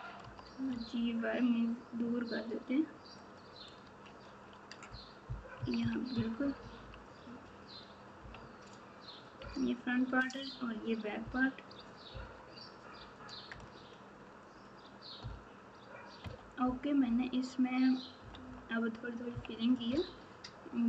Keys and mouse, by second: 5.5-6.6 typing, 12.1 KP_Divide, 16.2 KP_Multiply, 17.0 KP_8, 18.2 KP_Subtract, 18.4 KP_Subtract, 19.3 KP_2, 19.8 KP_6.